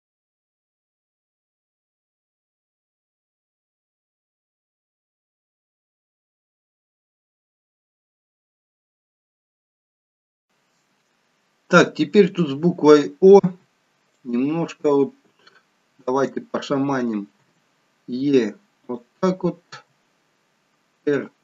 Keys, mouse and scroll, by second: 0.8 g, 1.9 click, 2.4 r, 3.5 g, 4.3 click, 4.7 g, 5.9 shift+middle click, 7.1 click, 7.7 r, 8.4 g, 13.7 r, 15.3 g, 17.4 e, 19.6 r.